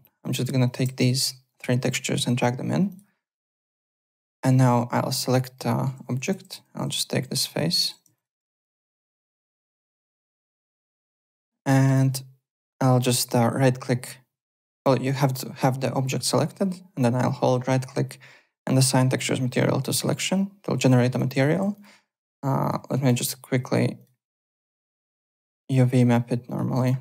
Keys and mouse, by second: 0.2 click, 0.6 shift+click, 1.2 click, 2.9 click, 4.0 click, 5.2 click, 5.5 click, 5.7-6.8 typing, 6.2 click, 6.6 ctrl+d, 7.4 click, 8.1 click, 8.4-9.6 typing, 8.7 click, 9.1 click, 9.4 middle click, 9.8 click, 10.3 click, 11.6 alt+middle click, 13.6 right click, 15.0 click, 15.9 click, 17.2 right click, 20.8 click, 21.2-22.1 typing, 21.7 click, 22.9 click, 23.5 z, 23.9 click, 25.6 click, 26.4 click.